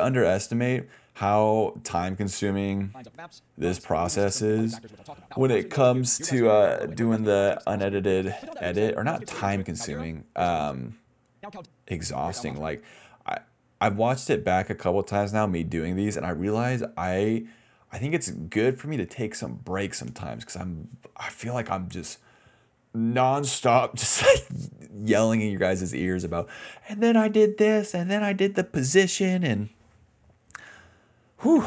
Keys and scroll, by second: 2.9 space, 4.1 d, 11.3-13.7 typing, 15.8-16.6 typing, 18.2 ctrl+z, 19.1 ctrl+shift+z, 20.1 ctrl+x, 20.5-21.0 typing, 21.6 ctrl+v, 22.8 d, 27.0 BackSpace, 31.0-31.6 typing.